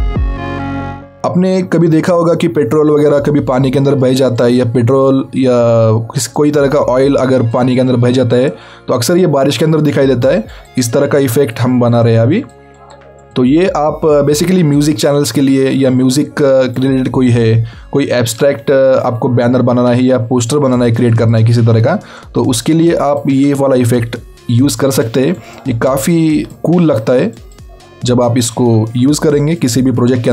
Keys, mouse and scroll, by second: 2.4 alt+scroll up 1, 3.0-4.5 scroll up 1, 4.5 click, 6.8 scroll up 1, 7.0-7.5 scroll down 1, 7.5 click, 17.9-18.8 scroll down 3, 19.4 scroll up 1, 20.6 click, 23.7-24.1 alt+scroll down 2, 25.0 click, 28.6 scroll up 1, 29.5 click.